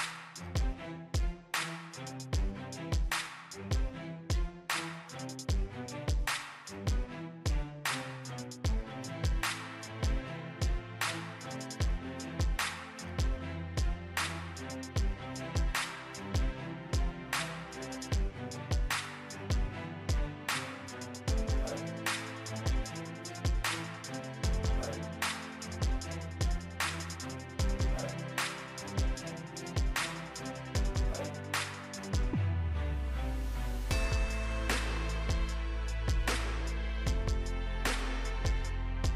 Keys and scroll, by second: 6.7 ctrl+c, 9.0 ctrl+v.